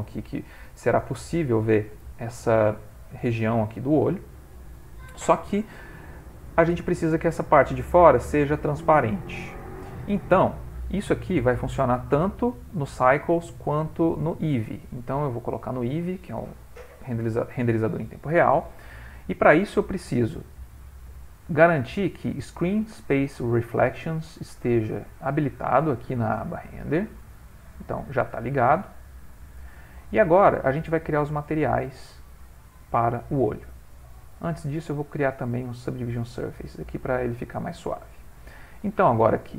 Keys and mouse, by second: 1.0 middle click, 3.1 middle click, 3.3 middle click, 5.4 middle click, 8.3 middle click, 11.3 click, 11.9 middle click, 12.1 middle click, 14.3 click, 17.8 middle click, 21.8 click, 29.2 click, 34.1 click, 34.7 click, 36.7 middle click, 38.8 click.